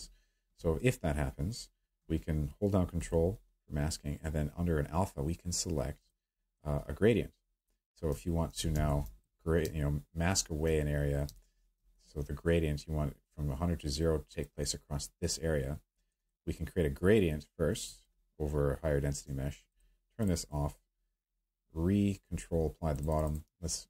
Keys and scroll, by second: 8.7 q, 10.6 ctrl+space, 11.3 space.